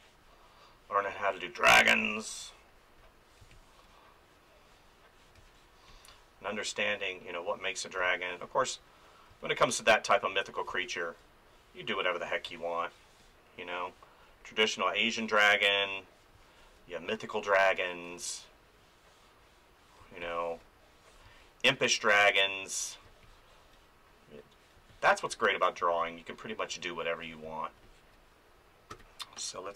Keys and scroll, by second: 1.9 space, 5.3 space, 8.0 space, 12.5 space, 16.3 space, 20.0 space, 23.0 space, 24.7 space, 28.9 ctrl+s.